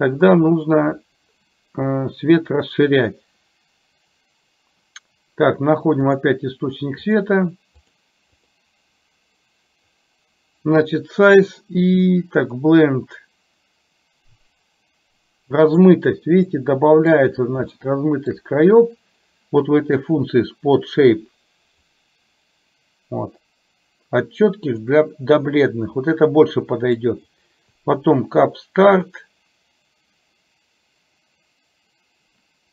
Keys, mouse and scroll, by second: 7.9 click, 8.5 click, 13.0-16.0 drag, 16.6-17.2 middle drag, 17.9-18.5 shift+middle drag, 21.9-25.0 drag, 26.6 middle click, 29.2-32.7 drag.